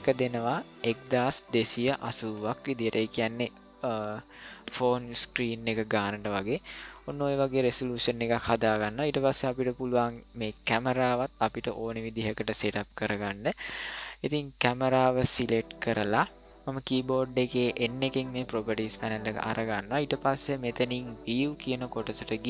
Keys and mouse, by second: 0.0-2.8 drag, 15.3 click, 17.4 n, 21.2 click.